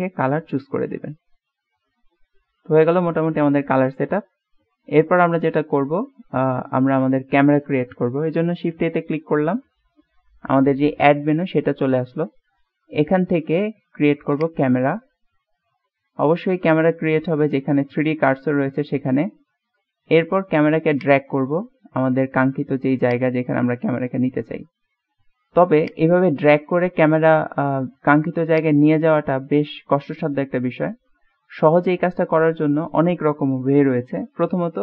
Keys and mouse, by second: 0.2-2.5 middle drag, 3.4-6.8 middle drag, 9.3 shift+a, 16.2-16.8 middle drag, 16.8-17.6 drag, 17.7 typing, 19.3 middle click, 21.0-22.1 drag, 23.2-24.6 drag, 25.0 click, 25.2 ctrl+shift+z, 26.0-27.1 drag, 27.3-27.9 middle drag, 28.7 click, 29.6 middle click, 34.5-34.8 middle drag.